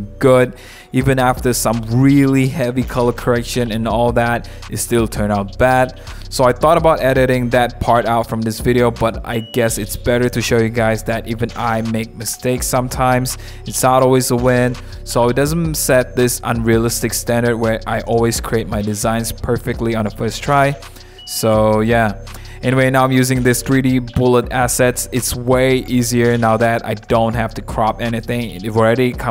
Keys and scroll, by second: 4.5 0, 7.7 0, 10.4 super+=, 10.8 super+=, 19.2 super+0, 19.5 super+-, 19.8 super+-, 21.3 super+0, 21.9 super+-, 22.1 super+-, 24.0 super+j, 27.7 super+1, 28.5 w.